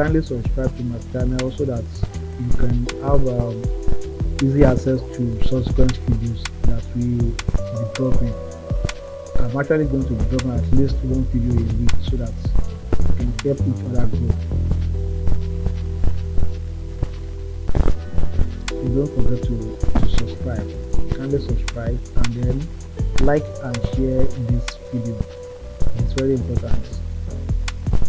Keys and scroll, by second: 10.9 [.